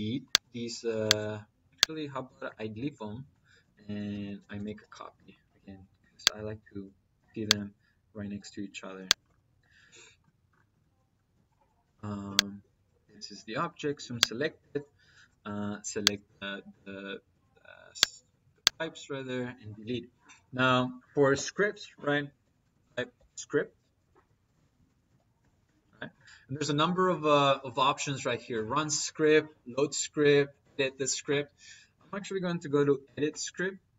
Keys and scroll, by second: 2.6 ctrl+z, 3.5 Escape, 4.0 c, 4.5 p, 4.8 -, 7.0 -, 9.1 Escape, 17.1 Delete, 18.1 Delete, 18.8 Delete, 20.3 Escape, 22.5 r, 22.7 i, 23.7 Escape, 24.3-25.5 typing, 29.3 Down, 30.0 Down, 33.1 Return.